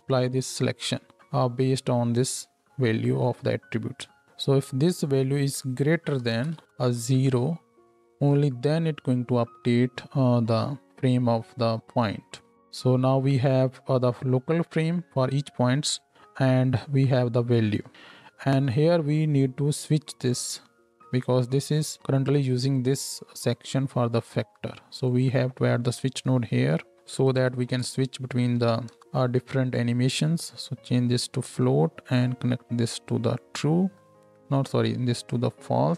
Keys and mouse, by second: 8.2-11.1 drag, 11.1-25.0 middle drag, 25.0-30.2 drag, 26.5 shift+a, 30.2-35.9 middle drag.